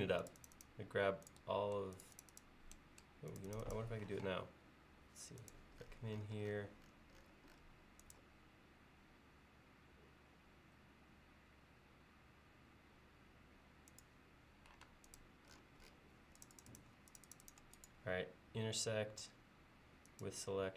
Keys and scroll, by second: 4.2 q, 14.9 space.